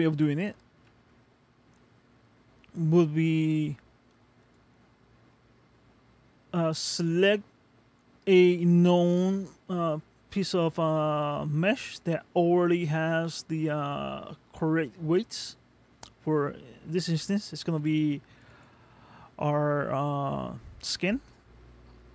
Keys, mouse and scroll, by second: 0.9 ctrl+Tab, 1.8 middle click, 4.4 click, 5.3 middle click, 15.2 middle click, 17.8 g, 21.2 middle click.